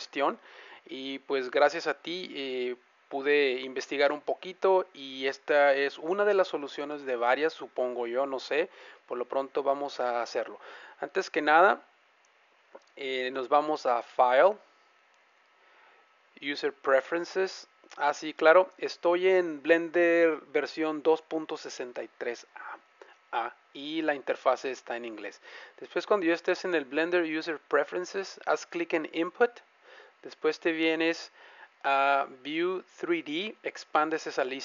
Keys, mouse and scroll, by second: 2.1-3.9 middle drag, 12.8-16.2 drag.